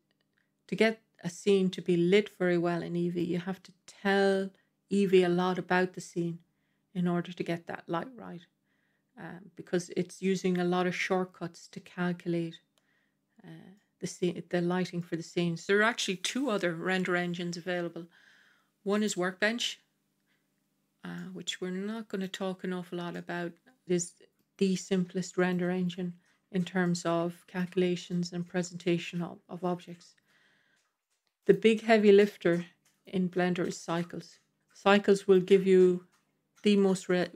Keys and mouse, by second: 1.6-3.0 middle drag, 13.6-14.1 middle drag, 14.8 middle drag, 15.7-19.0 drag, 21.1-22.1 middle drag, 23.0-24.3 middle drag, 25.2 middle drag, 26.7-27.5 middle drag, 28.0-29.8 middle drag, 31.4-33.0 drag, 34.6 middle click, 36.6-37.3 middle drag.